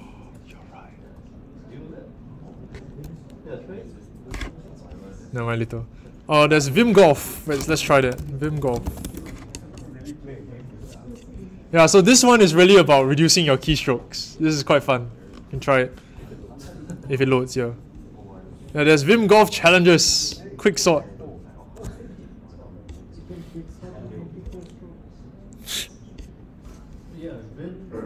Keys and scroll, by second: 7.3-9.6 typing.